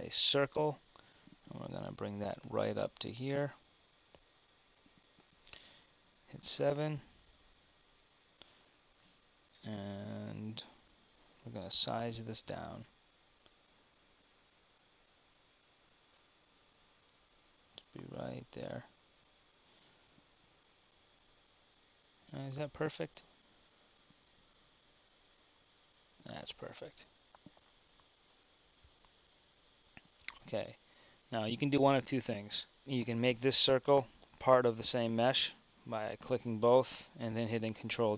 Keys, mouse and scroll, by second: 2.4-5.2 drag, 6.3 KP_7, 10.9 KP_7, 12.7 s, 23.0 KP_7, 24.7 s, 26.4 KP_1, 29.0 Tab, 30.7 Tab, 31.9 z, 32.8 Tab.